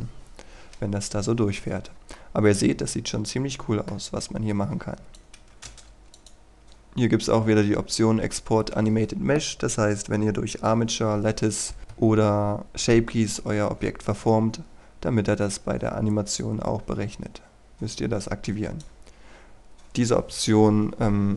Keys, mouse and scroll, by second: 2.3-4.4 middle drag, 5.2 click, 5.5 KP_1, 5.8 Return, 6.3-19.5 drag.